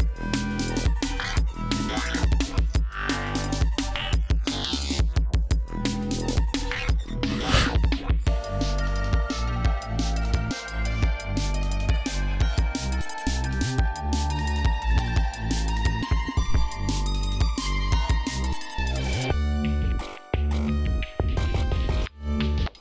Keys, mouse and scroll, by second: 0.3 click, 1.6 scroll down 2, 2.3 ctrl+scroll down 2, 2.8 ctrl+scroll up 2, 7.5 ctrl+scroll down 2, 7.8 ctrl+scroll up 2, 8.6-9.3 ctrl+scroll down 5, 10.0 scroll up 2, 11.0-11.8 scroll up 4, 14.5 ctrl+scroll down 2, 14.9 ctrl+scroll up 2, 16.6-17.3 scroll down 4, 17.6 scroll up 2, 20.0 ctrl+scroll down 2, 22.5 ctrl+scroll down 2.